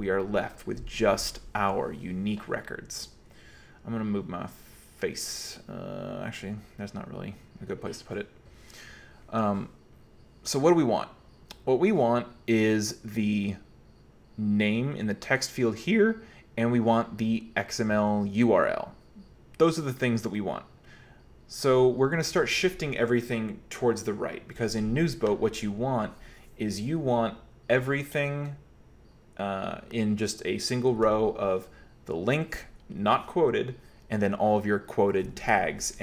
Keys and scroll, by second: 0.1 Escape.